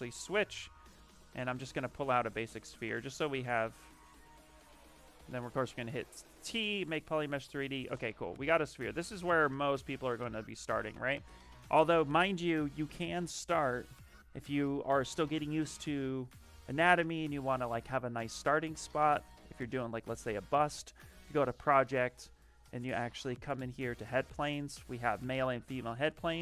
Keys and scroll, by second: 5.1 t, 7.0 shift+f, 11.7 ,.